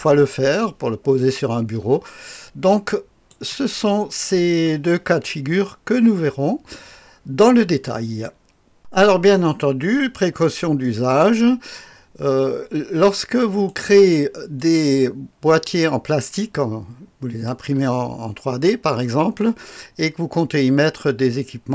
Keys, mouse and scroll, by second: 3.3 click, 8.8 click, 13.4 click, 17.5 click, 18.1-18.7 scroll up 1, 18.7-19.4 scroll down 1.